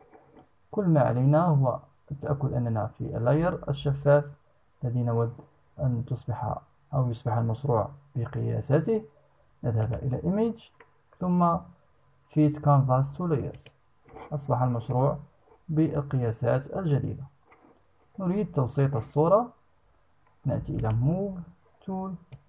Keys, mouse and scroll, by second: 9.3 click, 13.0 click, 20.3 click, 21.9-22.4 drag.